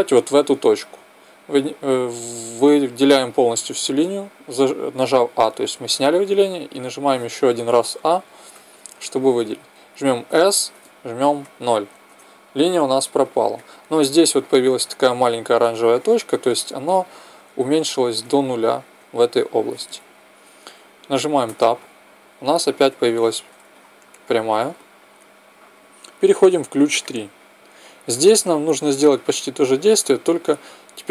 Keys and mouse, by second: 1.5 a, 8.5 a, 10.2 s, 13.5-21.5 middle drag, 21.5 Tab, 23.0-26.9 middle drag, 26.9-28.7 drag.